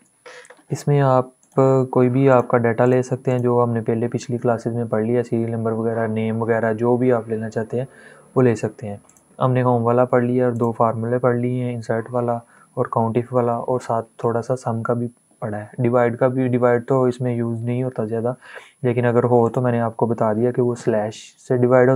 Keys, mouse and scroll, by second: 1.1 click, 8.7 click, 19.1 click.